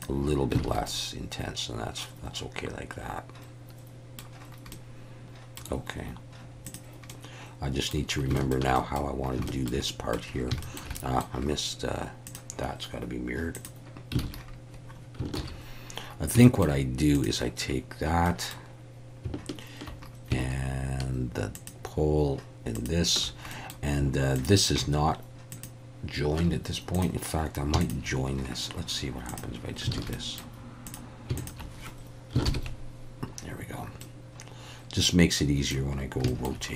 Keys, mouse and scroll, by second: 0.0 click, 0.6 alt+a, 0.9-4.2 middle drag, 4.7 middle click, 6.7 click, 7.1 middle click, 8.4 shift+middle click, 8.8 middle click, 9.5 shift+middle click, 9.9 middle click, 10.6 shift+middle click, 10.9 middle click, 12.3 click, 13.6 click, 14.2 alt+a, 15.4 ctrl+s, 16.4 shift+middle click, 17.2 click, 18.3 middle click, 23.5 middle click, 24.4 shift+click, 25.6 shift+click, 29.3 click, 30.0 alt+a, 30.1 middle click, 30.9 click, 31.4 shift+click, 32.5 ctrl+j, 34.0-35.7 middle drag, 36.3 shift+middle click.